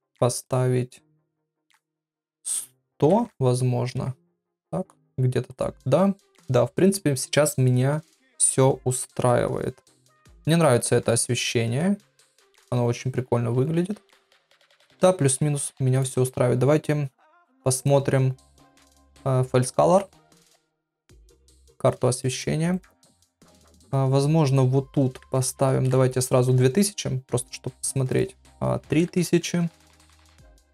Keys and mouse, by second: 0.4 click, 1.4-4.8 drag, 3.2 KP_0, 5.5 click, 15.9 click, 17.8-20.5 drag, 22.2 middle click, 22.7 click, 23.5 click, 24.4-30.7 drag, 26.1 KP_0.